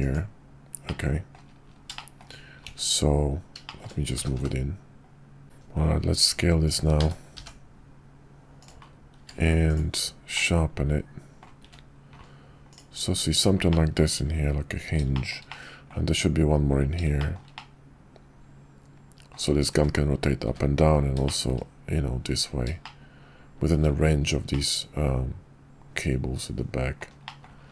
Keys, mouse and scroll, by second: 1.0 click, 2.1 shift+click, 3.7 shift+click, 4.1 g, 5.4 s, 6.9 s, 9.2 q, 10.4-11.4 drag, 13.7 shift+drag, 15.1 shift+drag, 15.4-15.9 middle drag, 17.2 shift+middle click, 17.5-19.3 middle drag, 20.4 `, 21.2 shift+middle click, 22.8-23.8 shift+drag, 24.5-27.0 drag, 27.2 middle click.